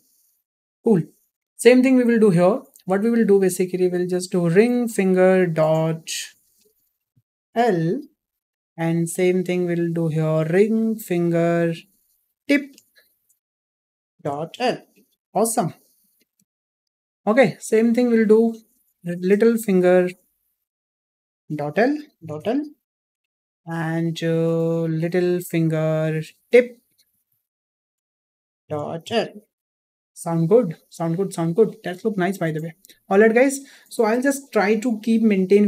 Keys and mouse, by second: 5.1-9.3 drag, 9.6 click, 11.1-16.5 drag, 16.9-17.3 shift+middle drag, 18.1 click, 20.1-23.8 drag, 24.2 click, 25.6-32.2 drag.